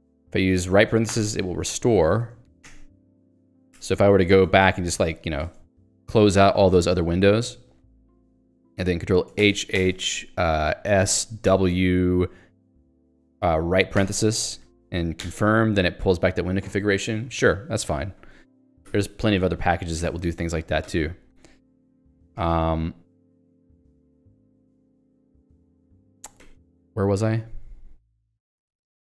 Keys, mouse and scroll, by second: 1.1 ), 2.7 y, 3.7 ctrl+g, 5.7 1, 11.0 s, 11.5 w, 14.0 ), 15.3 y, 20.0 ctrl+g, 21.1 ctrl+alt+j, 22.3 ctrl+g, 26.7 ctrl+alt+j.